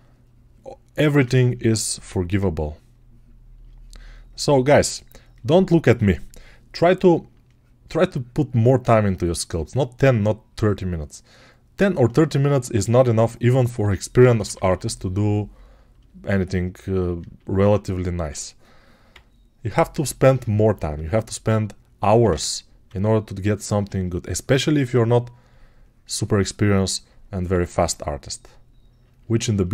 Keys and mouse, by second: 20.4 shift+[.